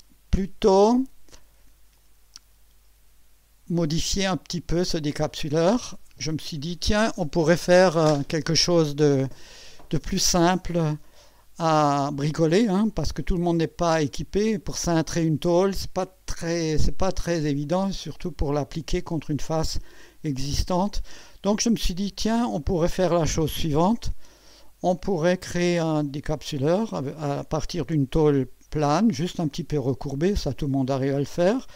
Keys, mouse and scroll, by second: 2.0 click, 3.2 scroll down 1, 3.8-5.8 drag, 10.6-14.3 drag, 17.8-18.7 drag, 22.6 click, 25.0-26.4 drag, 27.4-29.1 drag, 31.4 scroll up 1.